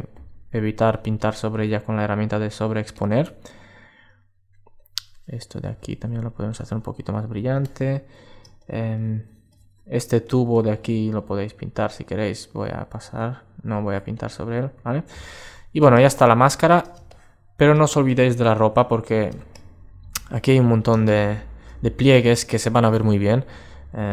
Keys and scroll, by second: 14.9 alt+space, 17.7 alt+<.